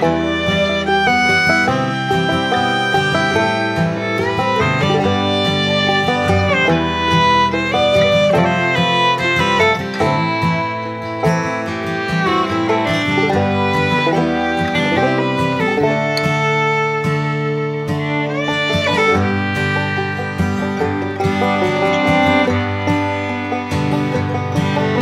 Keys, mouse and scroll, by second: 0.7 shift+middle click, 1.3 middle click, 8.2 middle click, 8.8 shift+middle click, 11.7 middle click, 14.5 middle click, 15.5-16.0 middle drag, 19.3 middle click, 19.9 shift+middle click, 20.6-21.0 middle drag, 21.2 shift+middle click, 21.6 middle click, 22.7 shift+middle click.